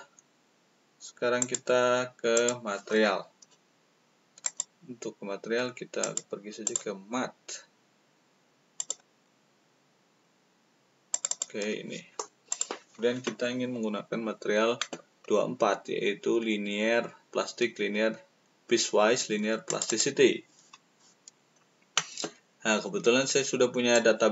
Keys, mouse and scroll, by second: 1.3 click, 2.3 click, 4.4 click, 5.9 click, 6.6 click, 8.7 click, 11.1 click, 12.4 click, 12.4 right click, 12.9-14.0 middle drag, 15.1-19.4 middle drag, 19.6 click, 19.8 click, 23.9-24.3 drag.